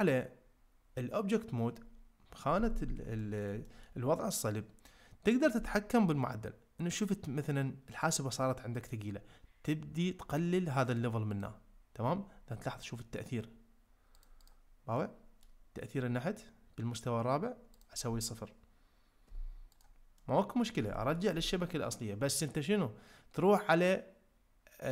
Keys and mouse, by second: 3.2 ctrl+middle click, 3.6 shift+middle click, 7.9-8.9 middle drag, 11.4-12.6 drag, 12.6-13.0 middle drag, 14.1 click, 14.5 click, 15.0-15.4 middle drag, 17.8-19.8 drag, 20.1-20.6 middle drag, 20.9 shift+middle click.